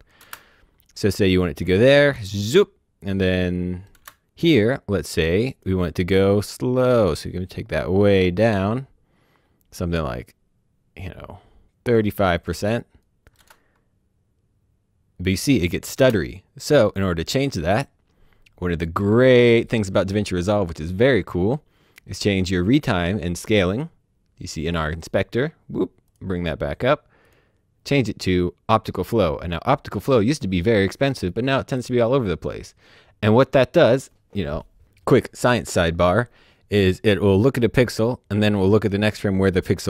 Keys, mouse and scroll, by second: 0.2 space, 3.6 space, 5.4 click, 7.1 click, 13.3 space, 15.9 space, 16.8 click, 23.4 click.